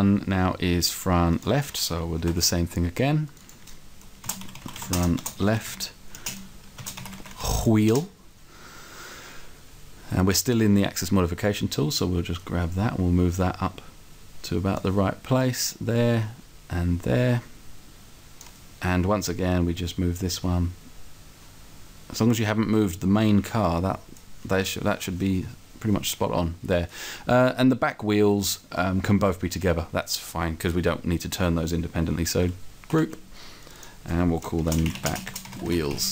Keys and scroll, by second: 4.2-7.3 typing, 7.9 Return, 32.9 alt+?, 34.6-35.9 typing.